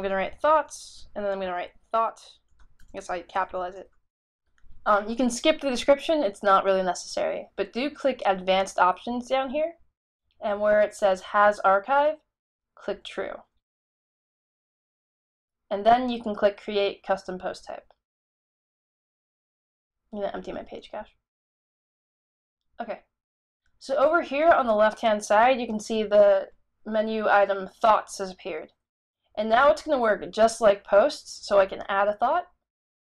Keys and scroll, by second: 0.0-5.2 typing.